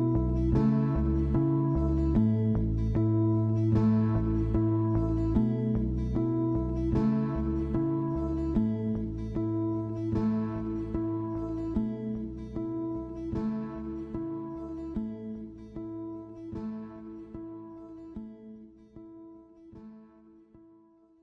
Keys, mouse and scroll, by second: 0.2-0.7 scroll down 1, 0.7-1.0 scroll up 1, 1.0 click, 1.6 scroll down 1, 1.9-2.6 shift+middle drag, 2.6 scroll up 2, 2.9-4.6 shift+middle drag, 4.6 click, 4.9-5.2 scroll down 3, 5.2-5.5 middle drag, 5.5-6.0 scroll up 4, 6.0-6.7 shift+middle drag, 6.7 scroll down 3, 7.1 click, 8.0 click, 9.3 s, 10.1-10.4 scroll up 4, 10.4-11.5 middle drag, 11.5 click, 12.6 scroll down 3, 12.9-13.7 middle drag, 13.7 click, 13.9-14.4 middle drag, 14.4-14.7 scroll up 5, 14.7-16.9 shift+middle drag, 16.9 scroll up 3, 17.1-18.7 shift+middle drag, 18.7-19.0 scroll down 3, 19.0-19.8 middle drag, 19.8 click, 20.4 click.